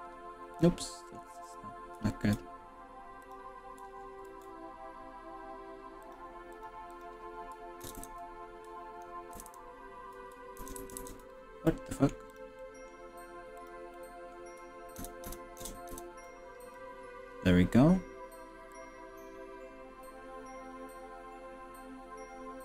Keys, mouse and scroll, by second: 0.6 click, 0.9 middle click, 1.4 click, 3.4 click, 4.4 ctrl+r, 7.0 click, 7.8 ctrl+KP_Add, 8.0 ctrl+KP_Add, 9.4 ctrl+KP_Add, 9.6 ctrl+KP_Add, 10.6 ctrl+KP_Add, 10.8 ctrl+KP_Add, 11.0 ctrl+KP_Add, 11.7-12.1 middle drag, 12.4 click, 12.6 middle click, 13.5 ctrl+KP_Add, 13.6 drag, 13.9 middle click, 15.0 ctrl+KP_Add, 15.4 ctrl+KP_Add, 15.6 ctrl+KP_Add, 16.0 ctrl+KP_Add, 16.8 middle click, 17.7 ctrl+KP_Add, 18.8 drag.